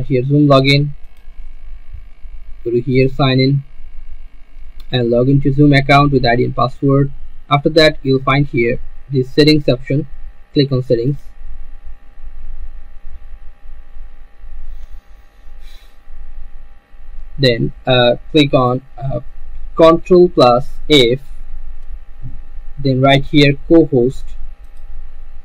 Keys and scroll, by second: 21.3 ctrl+f.